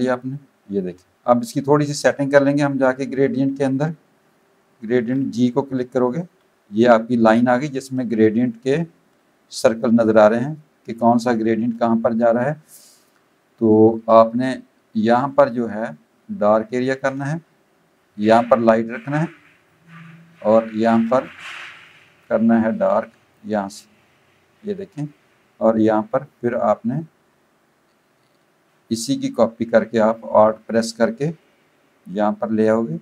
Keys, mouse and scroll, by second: 0.2 click, 6.4 g, 16.4 click, 19.2 click, 22.2 click, 31.2 alt+click.